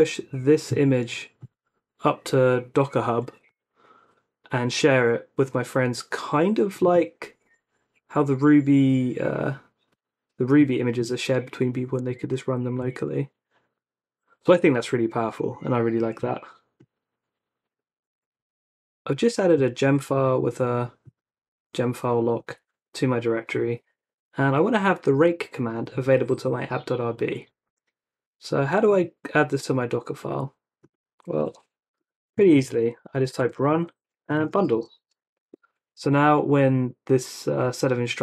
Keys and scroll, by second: 12.8 super+Tab, 31.4 Escape, 31.9-35.8 typing, 32.0 Escape, 37.5 typing.